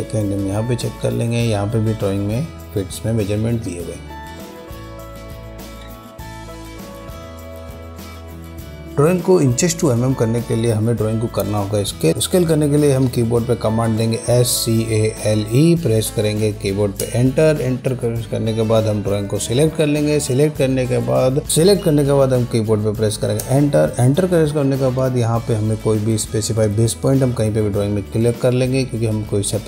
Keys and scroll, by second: 14.0-15.3 typing, 17.1 Return, 23.5 Return.